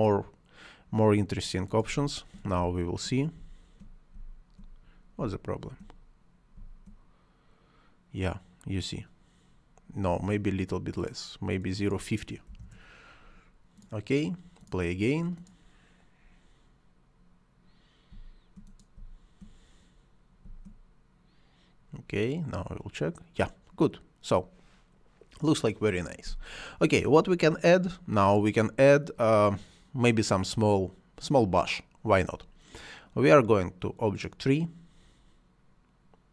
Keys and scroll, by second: 1.7 space, 9.7 Escape, 12.3 0, 12.4 Return, 17.9 space.